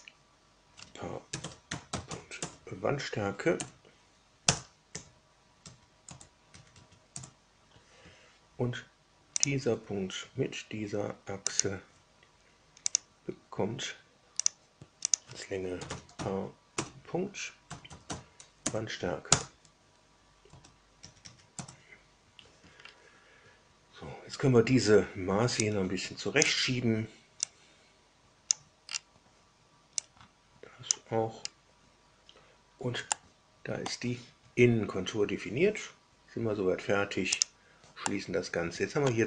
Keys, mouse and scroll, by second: 1.0-2.8 typing, 3.5 Down, 4.4 Return, 4.9 Tab, 5.5 Tab, 6.0 Return, 6.4 Tab, 6.7 Tab, 7.1 Return, 9.3 click, 11.4 ctrl+click, 12.8 click, 14.4 click, 15.0 click, 15.4-18.5 typing, 19.2 Return, 20.4 Return, 21.0 Tab, 21.1 Tab, 21.4 Return, 22.7 scroll down 2, 25.5-26.5 drag, 27.4-28.6 drag, 28.8 scroll down 2, 30.0-31.0 drag, 31.4 scroll down 2, 33.0 shift+middle click, 37.3 click, 38.0-39.2 middle drag.